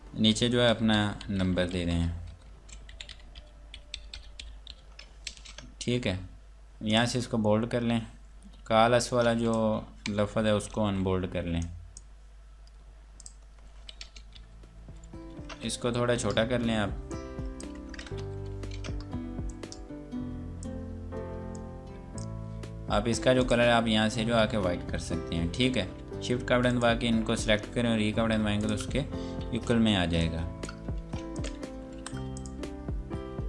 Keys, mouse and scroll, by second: 0.7 KP_Add, 0.8-4.7 typing, 5.2 ctrl+space, 6.7 click, 8.6 F8, 9.1 click, 10.7 u, 11.6 click, 14.0 space, 14.3 KP_4, 16.6 F8, 17.1 click, 18.1 ctrl+KP_4, 18.5 ctrl+space, 19.4 click, 25.0 shift+Page_Up, 26.7 shift+click, 28.0 e, 28.5 click, 29.5 F10, 30.2 click, 31.0 ctrl+space, 31.3 shift+click, 32.0 e, 32.4 shift+click, 32.8 scroll down 1.